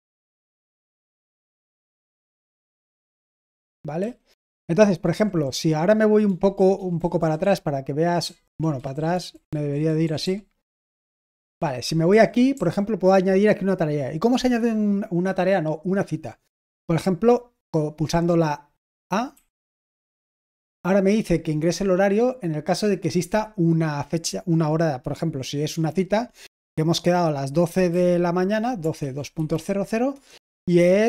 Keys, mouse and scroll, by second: 0.6-3.9 typing, 5.0-9.3 typing, 10.5 typing, 19.3 typing, 27.6-30.0 typing, 30.1 Return.